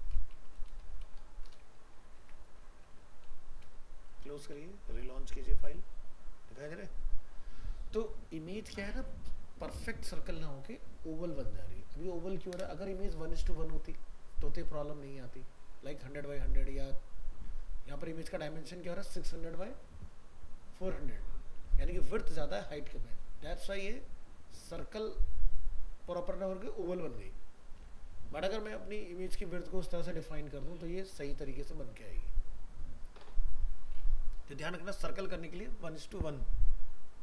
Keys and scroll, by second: 1.8 ctrl+s, 2.2 alt+Tab.